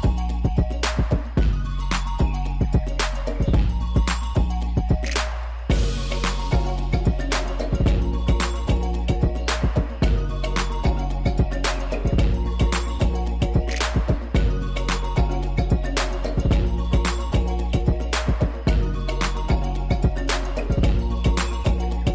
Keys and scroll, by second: 8.6 u, 19.8-22.0 typing.